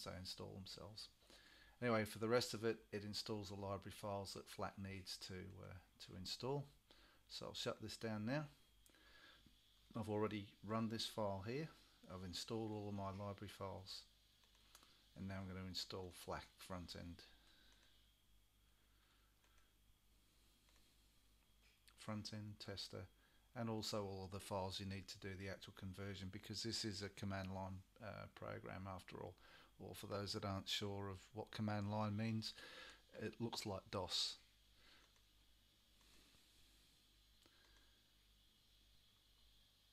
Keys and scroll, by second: 17.9 typing.